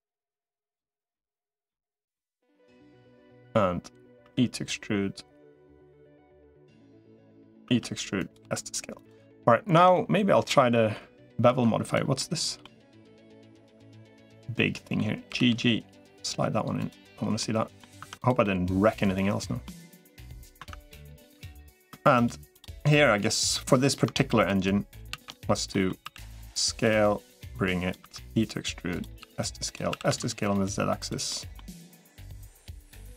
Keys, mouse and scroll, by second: 1.0 middle click, 1.9 middle click, 3.0-4.0 drag, 4.0 e, 7.6 e, 8.4 s, 9.6 Tab, 9.8 middle click, 11.4 Tab, 12.0 middle click, 13.0 click, 13.8 1, 14.1 middle click, 15.2 g, 17.2 middle click, 17.8 Tab, 18.4-19.4 middle drag, 19.9 middle click, 20.4 Tab, 20.8 click, 21.4 3, 22.0 shift+click, 22.7 middle click, 24.2 shift+click, 25.0 shift+d, 25.5 middle click, 25.8 s, 27.4 click, 27.8 e, 29.0 s, 29.8 s, 31.1 middle click, 31.8-33.1 drag.